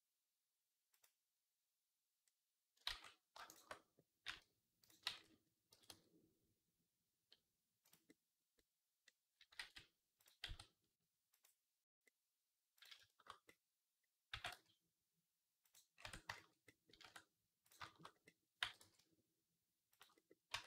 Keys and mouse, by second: 2.7 ctrl+z, 3.3 shift+middle click, 4.1 g, 4.9 ctrl+z, 5.1-8.5 right drag, 5.6 g, 8.5-12.8 right drag, 9.4 ctrl+z, 10.3 x, 14.1 g, 16.1 Tab, 16.9 Tab, 18.4 g, 20.3 Tab.